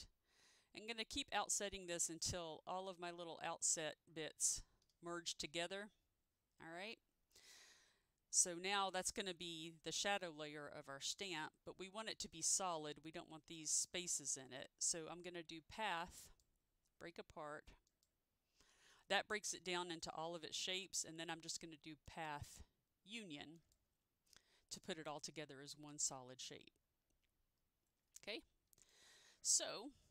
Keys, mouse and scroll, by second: 9.0 ctrl+u, 9.1 click, 11.3 ctrl+z, 16.4 click, 18.0 click, 22.2 click, 22.2 click, 23.7 click, 28.9 ctrl+z, 28.9 click.